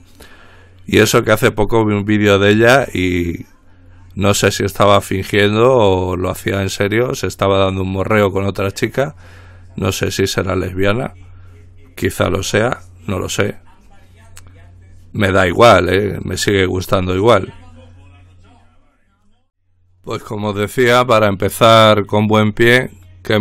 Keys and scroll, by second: 20.2 ctrl+r.